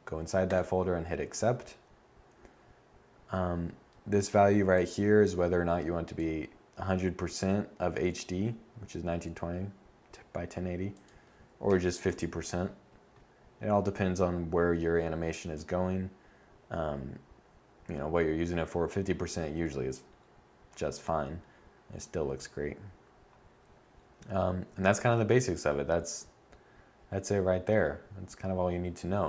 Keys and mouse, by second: 4.1-10.3 drag, 28.4-29.2 middle drag.